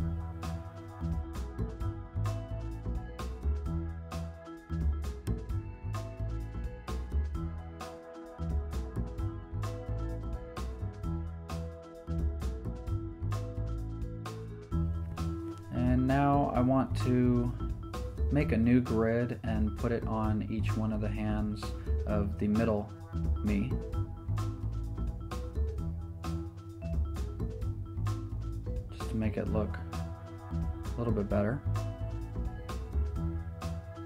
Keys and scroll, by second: 1.7 super+Return, 2.6 v, 4.3 super+t, 11.0 Return, 18.8 super+j, 22.9 z, 24.5 v.